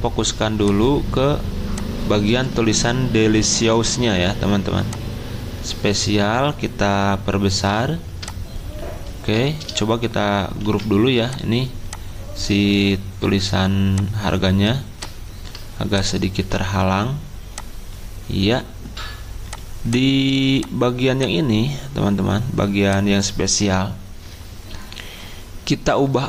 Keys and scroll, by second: 2.3 ctrl+z, 10.6 ctrl+g, 16.4 z.